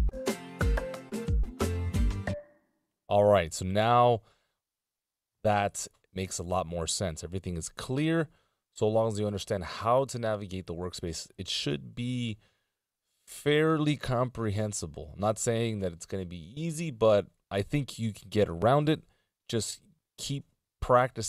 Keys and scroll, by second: 0.5 super+Return, 12.1 super+Return.